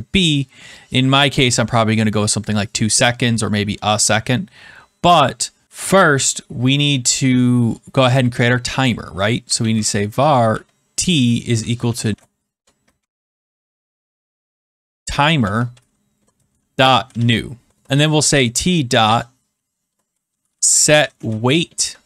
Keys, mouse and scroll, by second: 2.4 click, 9.1-12.6 typing, 12.9 Escape, 14.0-21.8 typing.